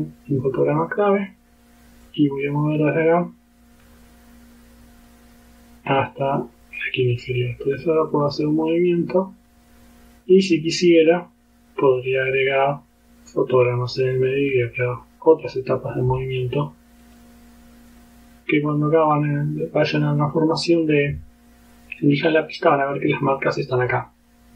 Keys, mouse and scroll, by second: 1.3 click, 2.1 click, 2.7-7.0 drag, 8.1-13.0 drag, 14.1 click, 15.4 click, 17.1 click, 17.9 click.